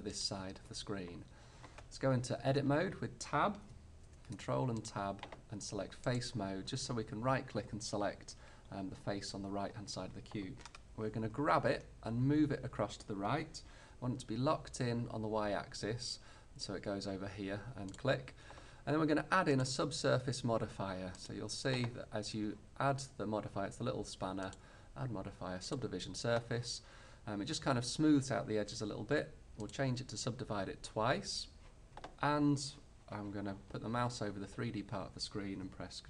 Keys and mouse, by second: 0.4-1.9 drag, 2.6 Tab, 4.1 ctrl+Tab, 11.4 g, 18.0-23.3 drag, 24.6-26.1 drag.